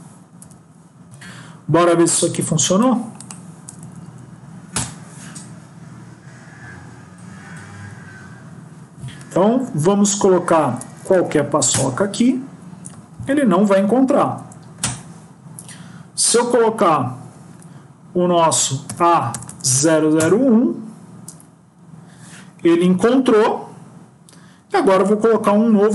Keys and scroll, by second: 0.5 Delete, 1.1 ctrl+s.